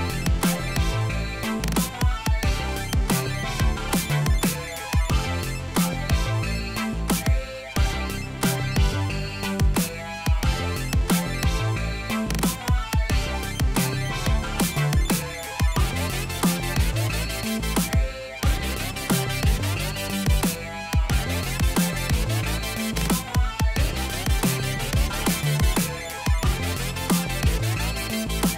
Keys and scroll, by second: 7.8 ctrl+t, 27.4 ctrl+t.